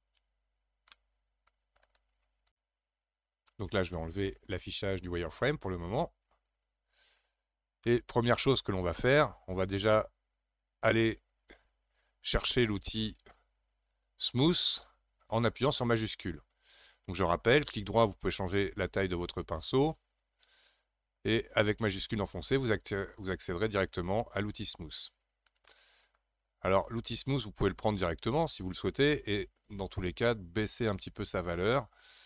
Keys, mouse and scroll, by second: 0.9-2.7 middle drag, 4.8-7.8 drag, 7.8-10.8 shift+middle drag, 11.5-14.6 drag, 17.4-22.0 right drag, 22.0-25.6 shift+drag, 25.6 middle click, 26.4-32.2 shift+drag.